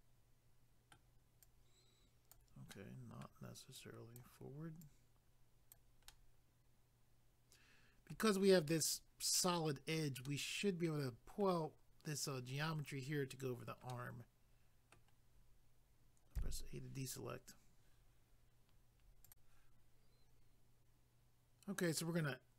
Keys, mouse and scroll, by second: 1.4 click, 2.7 middle click, 3.8 click, 4.8 click, 6.1 middle click, 10.2 middle click, 12.8 scroll down 1, 13.9 middle click, 16.4 a, 19.3 click, 19.3 click.